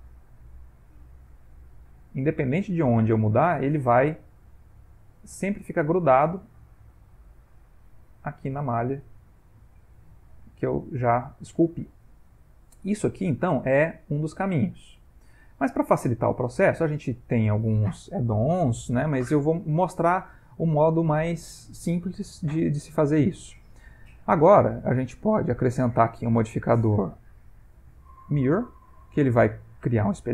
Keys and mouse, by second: 1.0 g, 2.3 middle click, 4.1 g, 5.1 middle click, 6.5 g, 7.4 middle click, 8.5 g, 10.4 middle click, 11.1 ctrl+middle click, 11.8 middle click, 12.7 ctrl+middle click, 13.1 middle click, 13.9 g, 15.3 middle click, 16.2 ctrl+middle click, 20.1 middle click, 20.9 middle click, 21.5 ctrl+middle click, 22.1 ctrl+middle click, 22.7 middle click, 25.3 click, 26.2 click.